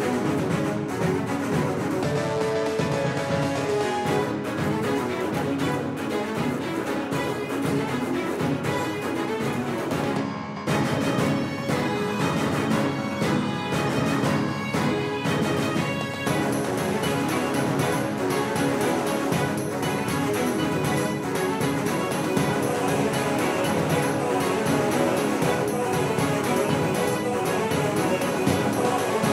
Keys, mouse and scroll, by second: 1.6 click, 1.9-4.3 right drag, 2.8-5.0 drag, 6.5-7.7 middle drag, 10.9 Tab, 17.0 middle click, 17.4 Tab, 18.2-22.9 right drag, 20.0-22.1 drag, 22.9 f, 26.6 ctrl+z, 27.5 ctrl+z, 28.4-29.3 middle drag.